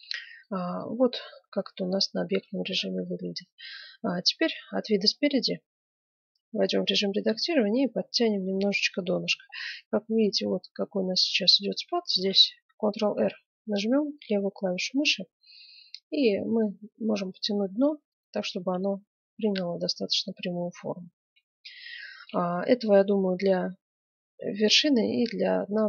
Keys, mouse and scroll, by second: 0.6-3.1 middle drag, 4.4 KP_1, 5.5 Tab, 5.5 middle click, 6.3 middle click, 8.4 middle click, 11.2-13.3 middle drag, 12.1 ctrl+r, 18.4 Tab, 19.8-21.4 middle drag, 23.0-24.4 middle drag, 25.6-25.8 middle drag.